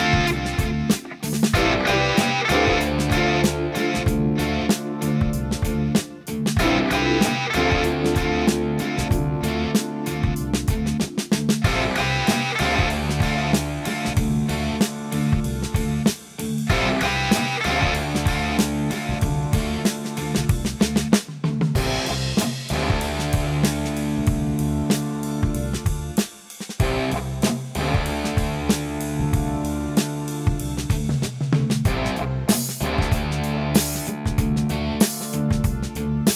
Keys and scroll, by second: 1.5 space, 3.1 space, 4.2 space, 5.1 space, 6.2 space, 7.8 space, 8.8 space, 10.3 a, 10.4 space, 17.8 space.